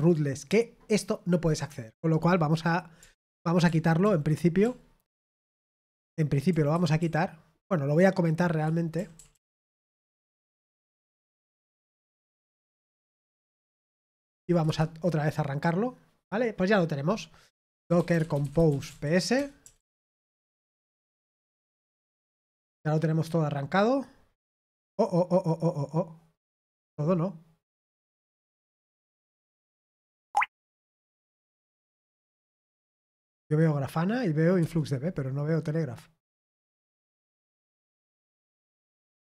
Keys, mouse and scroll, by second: 1.5 click, 3.6 ctrl+p, 4.0 ctrl+p, 4.6 ctrl+p, 5.4 Return, 9.1-14.3 typing, 11.6 Escape, 14.3 ctrl+p, 14.6 Return, 18.1-21.7 typing, 30.2 Tab, 30.2 typing, 38.6 j.